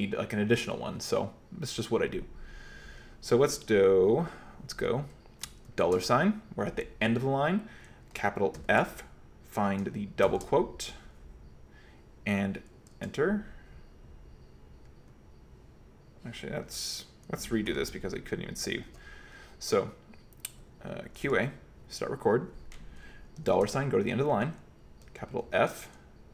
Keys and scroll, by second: 5.7 $, 8.6 shift+f, 10.3 shift+', 12.9 Return, 17.7 q, 18.5 k, 18.7 k, 18.9 k, 21.2 q, 21.5 a, 23.5 shift+4, 25.5 shift+f.